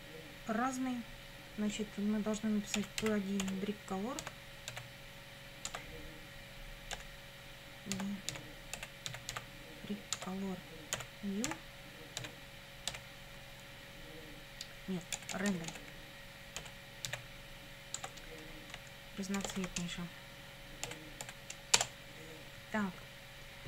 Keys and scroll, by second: 2.5-4.7 typing, 5.7 Tab, 7.0-9.8 typing, 10.2 Tab, 11.0 ., 11.5 n, 12.2 e, 12.9 w, 15.2 BackSpace, 16.6 ., 17.1 r, 18.0 Tab, 19.1-20.9 typing, 21.8 Return.